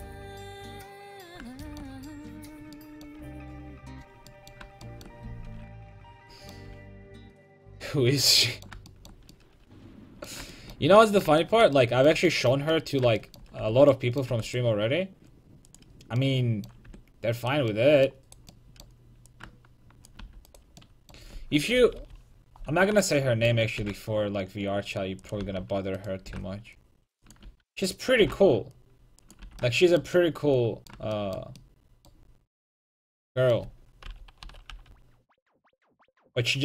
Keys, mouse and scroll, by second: 1.3-3.5 middle drag, 5.7 Tab, 7.1 alt+h, 10.7-13.6 middle drag, 13.6 Tab, 14.3 Tab, 14.5-15.7 right drag, 15.7 middle click, 16.0 click, 16.9 Tab, 17.4 click, 17.4 right click, 17.8 right click, 18.5-20.1 right drag, 19.3 click, 20.2 a, 21.8 KP_5, 22.0 KP_3, 23.8 g, 25.4 a, 26.0-29.6 right drag, 26.3 g, 27.4-29.2 drag, 27.5 a, 28.2 g, 29.4 a, 34.1 KP_5, 34.4 KP_3, 34.7 KP_5.